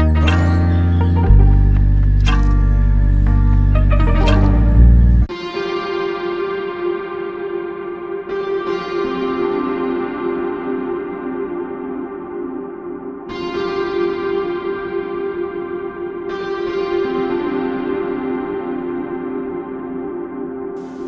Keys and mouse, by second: 0.2 shift+click, 1.5 alt+click, 3.7 double click, 9.0 shift+click, 12.3 alt+click, 16.4 shift+click, 18.1 shift+click, 18.8 shift+click, 18.9 alt+click.